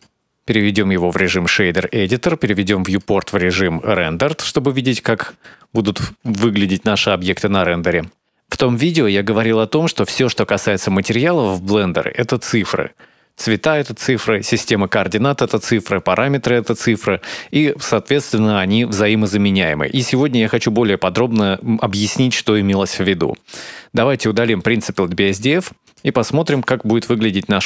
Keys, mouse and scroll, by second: 3.1 click, 3.9-4.5 scroll up 4, 4.5 scroll down 2, 5.2 shift+middle click, 23.7-24.3 scroll up 1, 24.3 middle click, 24.3 scroll up 2, 25.0 click, 25.6 click, 26.3 x.